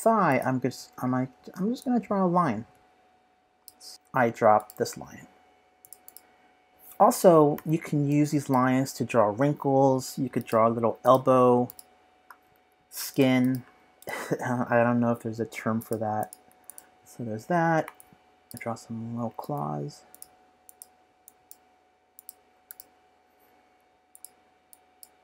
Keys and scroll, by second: 7.3-8.1 typing, 9.5 typing, 14.7 typing, 23.4 p.